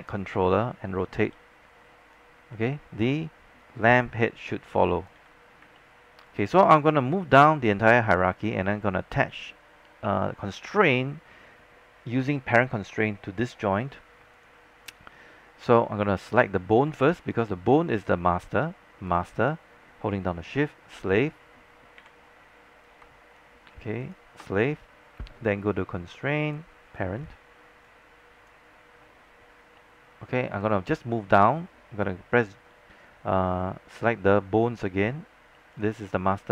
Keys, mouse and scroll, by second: 1.3 e, 2.2-5.2 drag, 5.2 z, 5.9 alt+middle click, 14.4 click, 15.5-16.0 scroll up 1, 16.2 alt+middle click, 16.7 scroll up 1, 17.1 alt+middle click, 17.3 scroll up 1, 17.8 click, 21.0 shift+click, 22.1 shift+w, 24.1-29.1 shift+drag, 29.5 scroll down 1, 29.9 alt+middle click, 35.8 click.